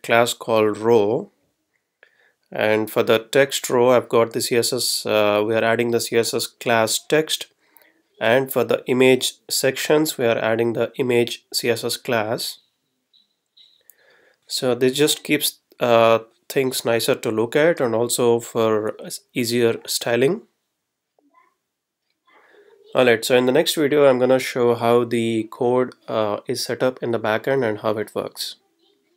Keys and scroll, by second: 18.2 Right, 18.9 Left, 24.7 F12.